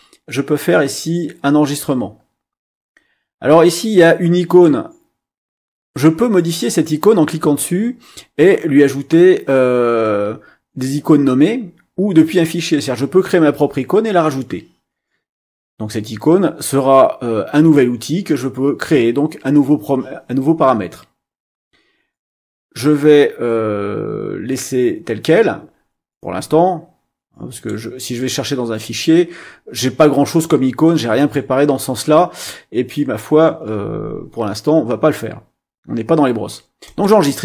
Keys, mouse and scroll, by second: 4.5 click, 27.5 click, 31.1 click, 36.9 click.